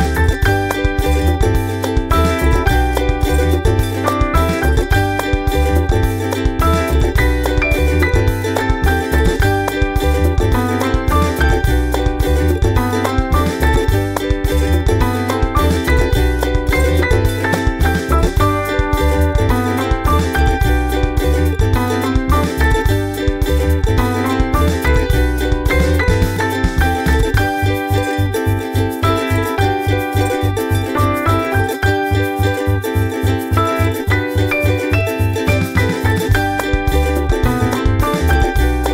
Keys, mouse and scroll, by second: 0.0-6.2 typing, 6.1-6.5 scroll up 1, 7.2 click, 7.6-8.7 drag, 9.1 click, 9.6 click, 10.5 click, 11.5 click, 11.7 click, 12.4 click, 12.8-13.2 ctrl+scroll down 2, 13.6 ctrl+scroll down 2, 14.0 middle click, 16.0 click, 17.7 click, 18.8 click, 19.9 click, 20.5 click, 21.7 click, 22.0 click, 22.8 click, 23.6 ctrl+scroll up 2, 24.2 click, 24.5 click, 25.3-27.6 drag, 27.8 click, 28.0 ctrl+scroll down 2, 28.4 ctrl+middle click, 28.7 ctrl+scroll down 2, 29.5 middle click, 34.8 ctrl+s, 34.9 ctrl+click, 35.6 click, 36.1 click, 36.3 click, 37.3 ctrl+c, 38.8 click.